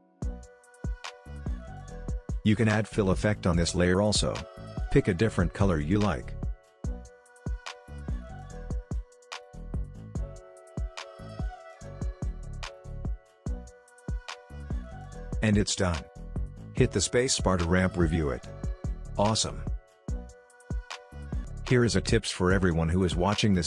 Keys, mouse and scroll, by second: 3.8-16.0 drag, 16.0 space, 17.8-20.0 drag, 20.0 space, 21.4-23.6 drag.